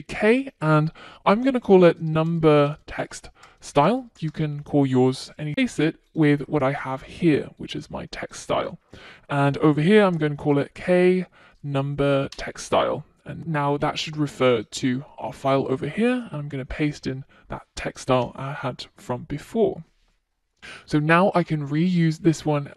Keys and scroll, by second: 10.0 super+x, 13.7 Return, 17.6 super+v.